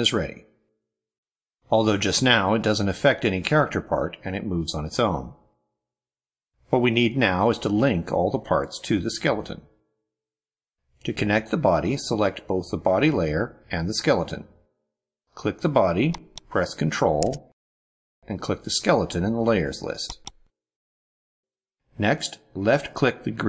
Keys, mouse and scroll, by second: 0.1 ctrl+scroll down 2, 1.7 click, 3.4 click, 4.3 click, 5.6 click, 6.6 click, 7.7 click, 13.4-14.2 ctrl+scroll up 2, 14.6-15.5 ctrl+middle drag, 15.9 click, 19.9 ctrl+click.